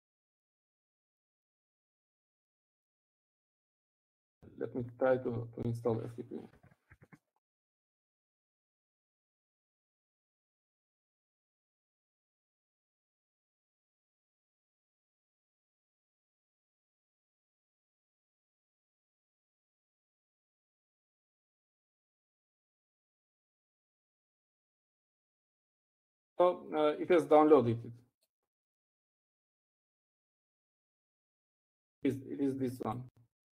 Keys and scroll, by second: 25.8 Up, 30.9-31.6 typing.